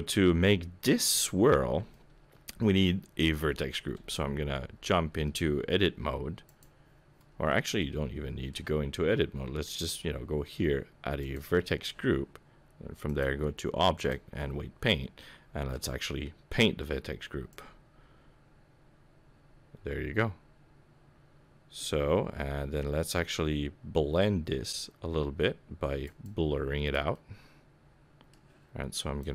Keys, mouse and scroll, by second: 1.0-1.3 scroll up 1, 1.9 middle click, 4.1 Tab, 6.4 click, 7.4 Tab, 7.8 middle click, 9.6 click, 11.2 click, 13.0 click, 14.7-15.2 scroll down 4, 15.2 middle click, 15.9-16.4 scroll down 2, 17.6 click, 26.3 click, 27.1 middle click, 29.2 click.